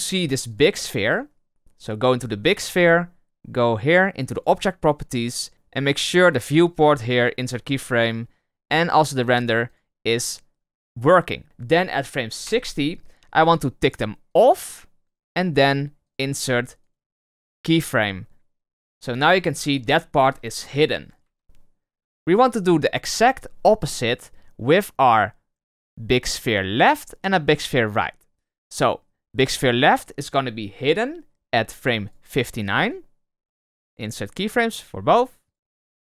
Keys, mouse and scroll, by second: 0.4 click, 0.8 click, 4.3 click, 6.2-11.4 right drag, 12.5 Right, 13.7 click, 14.2 click, 15.0-19.4 right drag, 19.4 Left, 19.8 Right, 20.2 Left, 20.6 Right, 20.9 Left, 21.2 Right, 22.1 Left, 26.7 click, 27.6 click, 28.6 click, 32.3 click, 32.7-36.1 right drag.